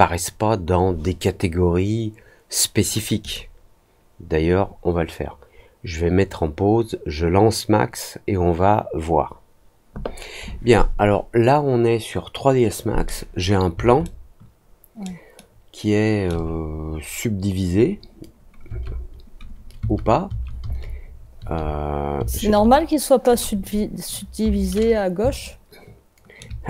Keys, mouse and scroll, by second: 3.2 click, 14.0-15.0 alt+middle drag, 15.3 alt+middle click, 25.4 alt+middle click.